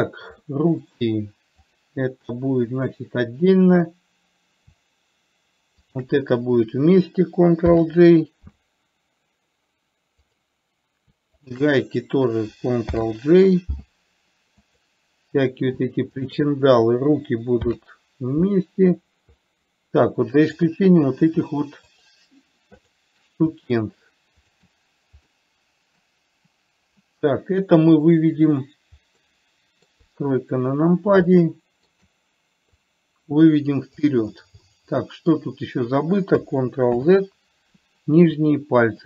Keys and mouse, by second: 0.8-1.3 middle drag, 1.9 click, 6.2 shift+click, 8.0 ctrl+j, 10.5 click, 11.8 shift+click, 13.3 ctrl+j, 16.5 shift+click, 18.0 ctrl+j, 20.7 click, 23.2 shift+click, 24.0 shift+click, 24.8 shift+click, 25.7-26.4 middle drag, 29.5-30.3 middle drag, 30.4 KP_3, 31.7-32.3 shift+middle drag, 33.2-34.3 drag, 34.9-35.7 middle drag, 37.3 ctrl+z.